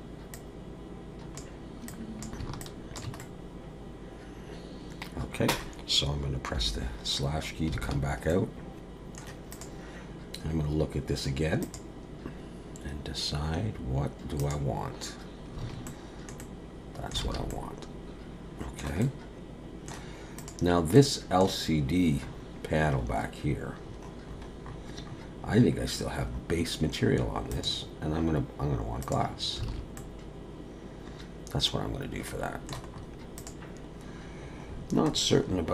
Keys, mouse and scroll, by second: 0.3 click, 1.9 click, 2.6 alt+click, 3.2 middle click, 7.3-7.7 scroll down 1, 7.8 alt+a, 8.3 middle click, 9.5 click, 10.5 scroll up 2, 11.6 click, 15.9 middle click, 16.4 middle click, 17.3 alt+a, 17.5 middle click, 19.0 middle click, 20.4 click, 20.9 middle click, 22.2-23.0 scroll up 4, 23.0-27.5 scroll up 39, 27.5 click, 29.7 alt+a, 30.0 middle click, 32.9-33.4 scroll up 3, 33.4 click, 34.4-35.7 scroll down 38.